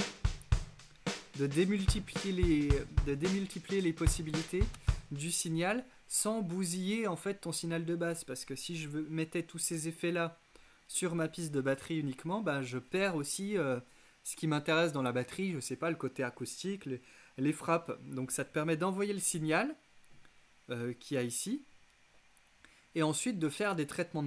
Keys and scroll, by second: 4.8 Return.